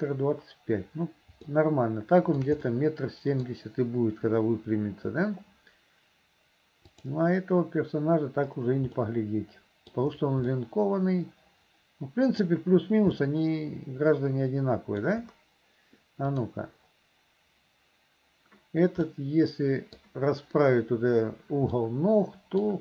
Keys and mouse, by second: 1.6 shift+middle click, 2.7 middle click, 6.9 click, 9.0-10.0 middle drag, 10.6-12.4 middle drag, 13.3-15.1 middle drag, 16.4-19.1 drag, 19.1 middle click, 21.8 middle click.